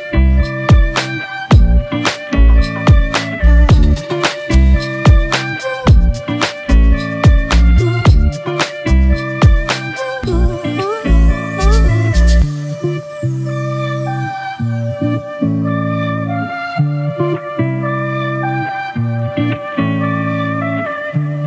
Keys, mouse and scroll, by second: 8.8-9.5 [, 20.9 alt+right click.